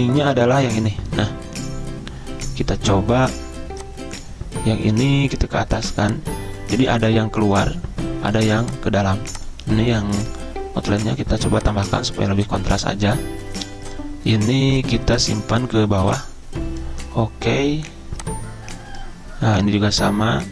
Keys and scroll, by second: 12.2 z.